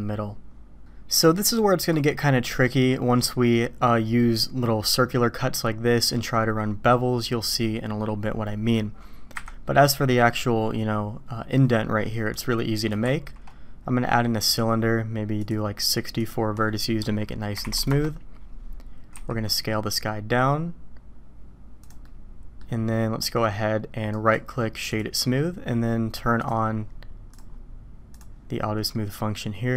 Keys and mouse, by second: 0.8-2.5 middle drag, 9.3 KP_7, 13.0 shift+a, 15.4 click, 16.2-18.6 drag, 19.1 s, 22.0-22.6 drag, 24.2-24.9 drag, 27.3 click, 28.1-29.7 drag.